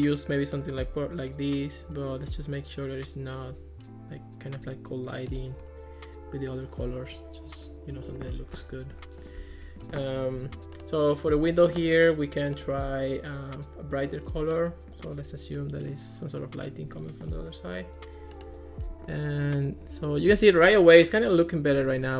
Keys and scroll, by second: 9.4 Escape.